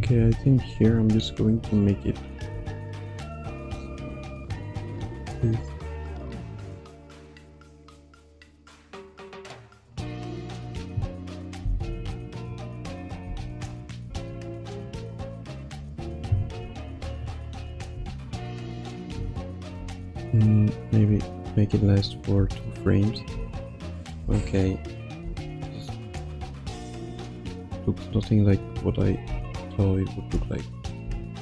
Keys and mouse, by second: 0.2 i, 3.0-10.6 shift+drag, 11.7 Left, 11.9 Right, 12.9 click, 13.2 space, 14.0 space, 14.7-15.9 drag, 16.6 i, 17.6 click, 17.9 space, 19.2 space, 19.8 ctrl+s, 21.0 g, 22.0 click, 22.4 space, 23.3 space, 23.9 click, 24.2 space, 25.2 space, 26.2 click, 26.9 click, 27.9 g, 29.0 click, 29.2 space, 30.2 space, 30.7 click.